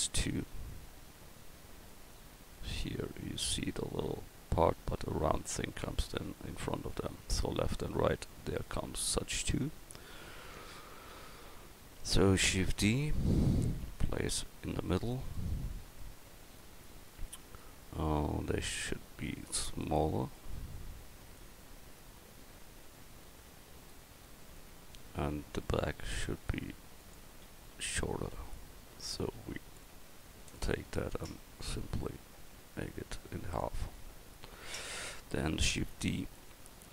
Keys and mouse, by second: 2.5 middle click, 6.2-6.6 middle drag, 10.6-12.3 middle drag, 12.3 shift+d, 13.8 click, 15.4 click, 18.7 s, 24.7 Tab, 27.5 a, 28.1 a, 29.2 c, 31.1-32.5 drag, 33.9 Tab, 35.8 shift+d.